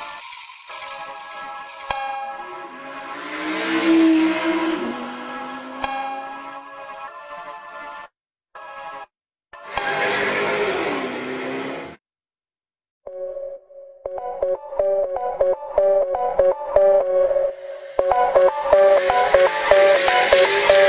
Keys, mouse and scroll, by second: 0.4 n, 1.1 scroll down 3, 1.3-1.7 scroll up 1, 1.7 click, 2.1-2.7 scroll up 1, 3.4-4.1 scroll up 3, 4.3 click, 5.2 click, 6.0 Tab, 6.3 click, 6.6-6.9 scroll up 2, 6.9 click, 7.1 click, 7.6 shift+click, 8.3 shift+click, 8.7 shift+click, 9.4 shift+click, 10.2-10.7 shift+drag, 10.8 shift+click, 11.0 shift+click, 11.4 shift+click, 11.7 shift+click, 12.3 click, 13.0 shift+click, 13.9 click, 14.5-15.0 shift+drag, 15.4 shift+click, 16.7 alt+shift+click, 17.4 alt+shift+click, 18.4 alt+shift+click, 18.8 alt+shift+click, 19.3 alt+shift+click, 20.7 alt+shift+click.